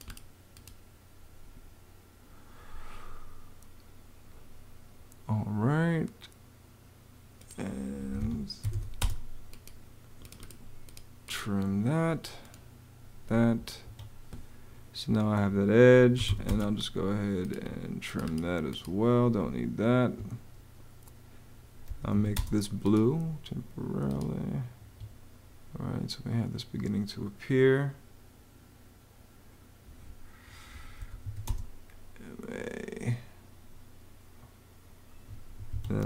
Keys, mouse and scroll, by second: 7.8 Escape, 8.2-9.0 typing, 13.7 Escape, 15.7-16.6 typing, 19.7 Escape, 21.7 m, 22.0 a, 22.2 space, 24.6 Escape, 30.6-31.6 typing, 35.1 Escape, 35.7-36.0 typing.